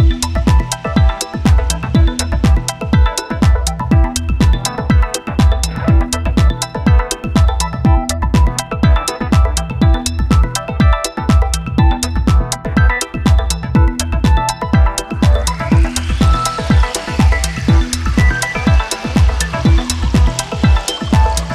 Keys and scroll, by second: 3.2 space, 5.5 space, 8.3 space, 10.3 space, 11.0 space, 13.4 space, 15.3 space, 16.9 space, 18.0 space, 19.3 ctrl+z, 19.4 space, 20.0 space, 20.7 space.